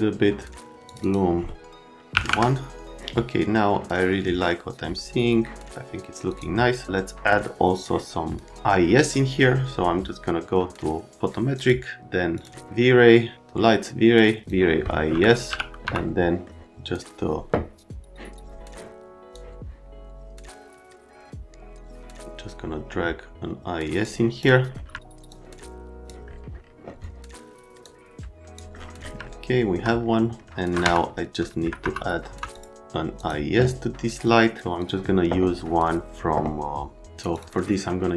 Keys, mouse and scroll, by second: 0.9 click, 1.0 click, 2.1 KP_1, 2.2 KP_Enter, 6.3 click, 7.7 click, 8.2 click, 15.5 f, 15.8 F3, 19.3 click, 25.3 click, 27.8 middle click, 29.2 alt+middle click, 30.8 F3, 31.4 alt+middle click, 31.8 F3, 32.3 F3, 32.5 click, 33.2 click, 34.2 click, 34.8 click, 37.3 click.